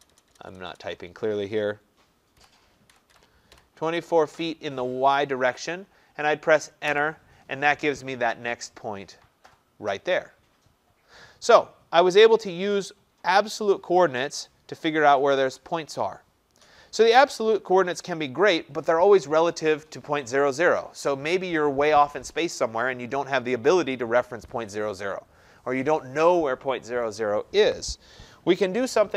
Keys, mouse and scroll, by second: 0.0-0.7 typing, 2.4-3.5 typing, 6.9 Return.